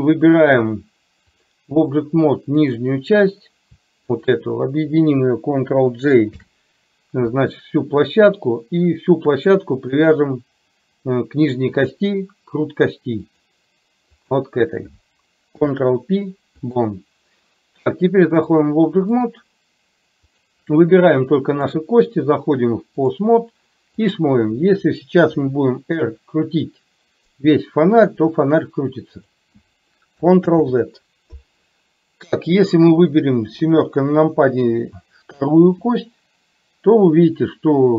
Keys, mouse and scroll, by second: 1.4 click, 2.7 click, 4.3 shift+click, 6.4 ctrl+j, 10.0 shift+click, 11.9-13.5 drag, 14.3 click, 15.5 ctrl+p, 18.7 click, 20.3 click, 21.5-23.3 drag, 24.0 click, 25.4 r, 30.5 ctrl+z, 32.4 click, 33.7 KP_7, 35.9 r.